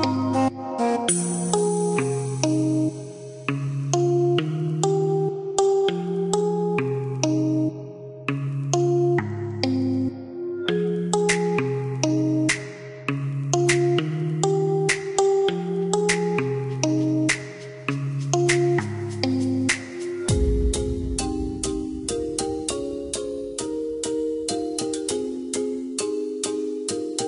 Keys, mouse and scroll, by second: 0.1 KP_Enter, 1.9 click, 3.7 KP_0, 3.9 KP_Decimal, 4.2 KP_3, 5.2 KP_Add, 8.0 click, 11.1 click, 13.2-15.2 typing, 14.3 KP_Add, 17.7 KP_Add, 18.1 KP_2, 19.1 KP_Enter, 20.7 Escape, 21.9 click, 24.2 click, 26.4 Escape.